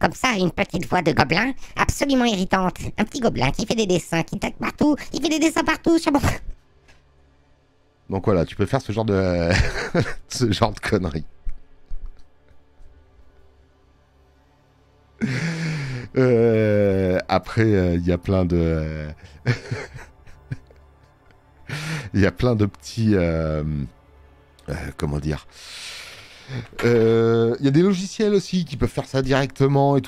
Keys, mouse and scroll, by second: 13.8 click, 17.0 space, 17.1 click.